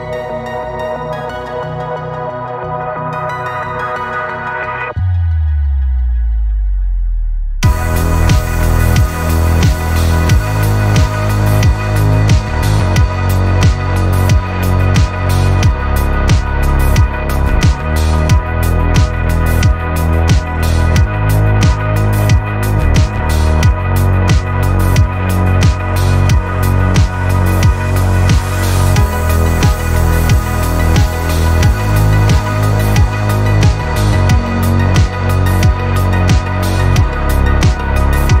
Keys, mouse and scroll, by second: 7.1 click, 7.6 middle click, 8.2 middle click, 8.9 middle click, 10.7 click, 12.7 click, 14.0 click, 15.7 click, 16.9 click, 18.0 click, 19.0 shift+click, 20.5 click, 21.5 click, 22.6 click, 31.8 click, 33.3 middle click, 33.6 click, 36.5 click.